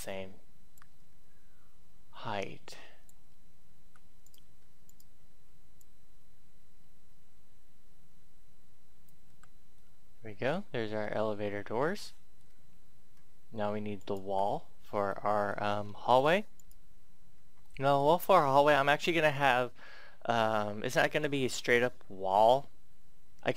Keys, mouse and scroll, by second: 0.7-3.0 drag, 3.8 Tab, 4.2 right click, 4.4 right click, 5.6-9.0 drag, 9.2 Tab, 9.7 middle click, 10.8 scroll down 1, 11.9 shift+middle click, 13.1 scroll down 1, 13.9-15.0 right drag, 15.1 shift+middle click, 15.6 shift+scroll, 15.8-16.3 scroll up 1, 16.3 right click, 17.2-17.6 scroll down 1, 17.6-23.5 middle drag.